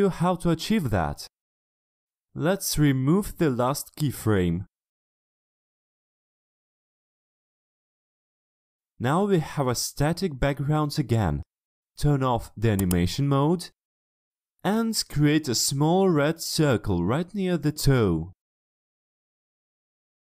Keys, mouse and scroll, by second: 4.9 click, 6.3 right click, 8.4 click, 9.4-11.1 drag, 11.6 ctrl+middle click, 11.6 ctrl+scroll up 1, 12.8 click, 15.6 click, 16.8 click, 18.0 middle click, 18.6-20.0 ctrl+scroll up 2.